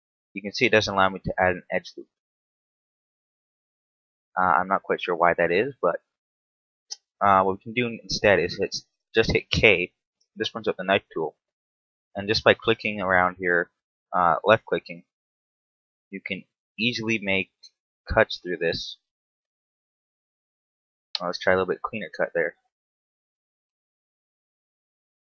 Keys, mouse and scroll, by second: 0.1 click, 0.3 right click, 1.1 z, 1.3 middle click, 1.9 middle click, 1.9 scroll up 1, 2.0 middle click, 2.6-3.1 scroll up 1, 3.1 ctrl+z, 4.1 KP_7, 4.7 ctrl+z, 5.8 shift+middle click, 8.7 k, 17.0 middle click, 21.3 z, 21.9 k.